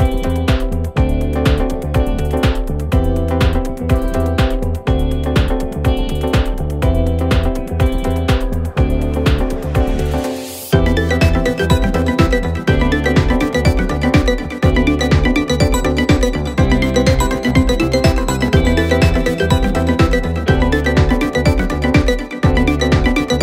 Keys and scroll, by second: 5.0 F1, 5.2 F2, 12.7 4, 17.0 2, 21.9 ctrl+d, 22.0 Escape.